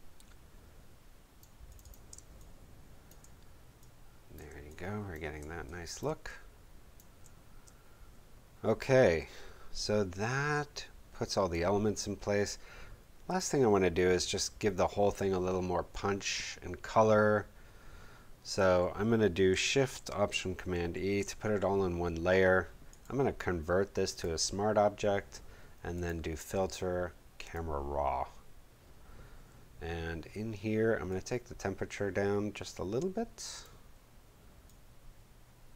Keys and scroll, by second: 2.0 space, 20.7 alt+shift+super+e.